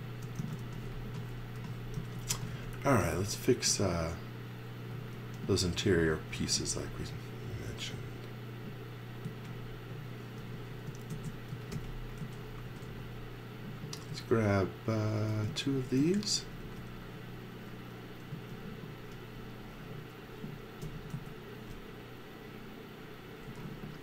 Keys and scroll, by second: 0.1-4.0 typing, 5.1 x, 6.6 v, 9.2 z, 10.4-13.9 typing, 15.7-17.1 typing, 18.3 z, 19.1 x, 20.8 m, 23.4 x.